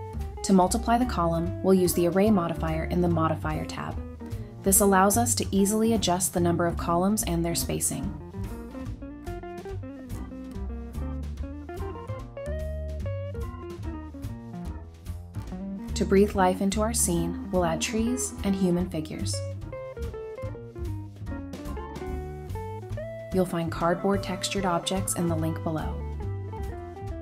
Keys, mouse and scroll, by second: 0.3 middle click, 2.5 double click, 2.8-4.3 typing, 3.7 Return, 4.4 Return, 5.5 typing, 5.6 Return, 6.5 double click, 7.0 scroll down 1, 7.1 middle click, 7.5 scroll down 1, 7.7 middle click, 10.2 g, 10.4 y, 11.3 scroll down 1, 11.5 middle click, 14.6-15.7 scroll up 1, 21.1 Escape, 21.2 Escape, 24.0 scroll up 1, 25.2 shift+click, 26.3 shift+click, 26.5 shift+click.